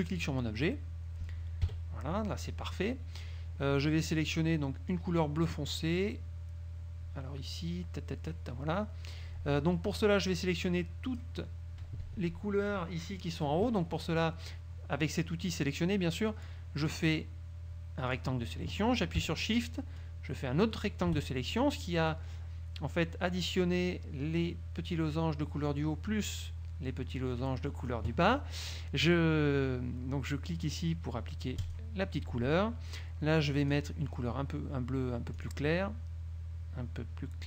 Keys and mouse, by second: 0.2 click, 1.8 KP_Subtract, 5.0-8.6 drag, 10.3-11.5 drag, 17.0-18.5 drag, 20.1 shift+click, 31.7 click, 33.8 click, 35.5 click.